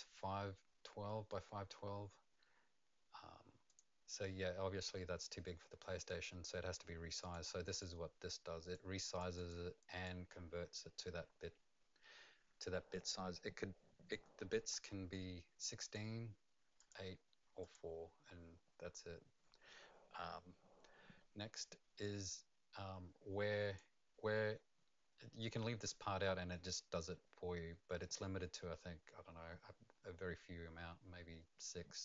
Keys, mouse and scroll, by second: 3.6 click, 7.2 click, 7.8 click, 9.3 click, 10.0 click, 15.8 click, 16.8 click, 17.6 click, 22.0 click.